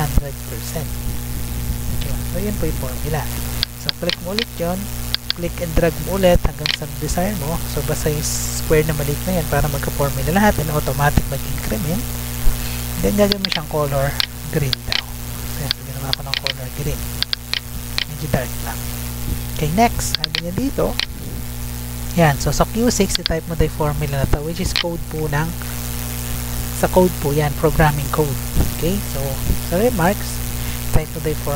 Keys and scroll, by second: 1.9 Return, 24.9 ctrl+c, 28.7 Tab, 30.4 F2, 30.8 ctrl+v.